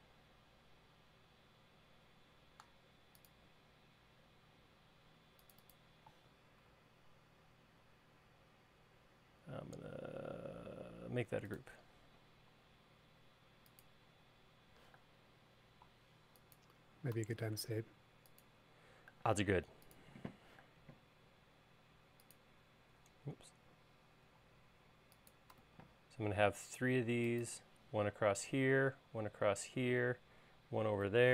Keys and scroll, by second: 15.0 m, 19.5 space, 20.8 m, 23.7 Escape.